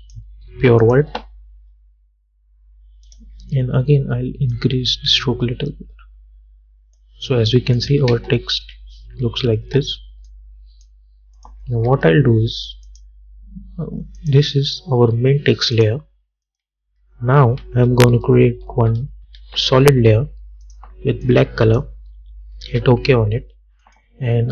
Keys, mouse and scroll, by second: 3.2-7.9 drag, 8.2 space, 10.4 click, 12.0 u, 13.0 click, 13.0 click, 19.5 ctrl+y, 20.8 click, 22.3 Return, 23.9 click.